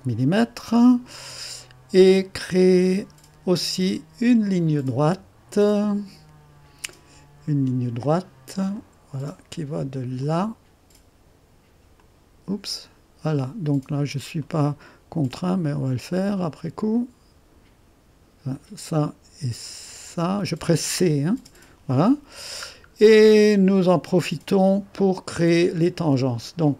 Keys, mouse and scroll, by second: 1.2-1.6 scroll up 1, 3.8-4.9 right drag, 8.7 click, 10.2 click, 11.9 click, 13.2 middle click, 14.0-14.4 scroll up 1, 14.4 right click, 16.1-18.3 drag, 18.5 click, 20.1-21.4 drag, 21.4 c, 22.1-22.7 scroll down 1, 23.3-25.0 right drag.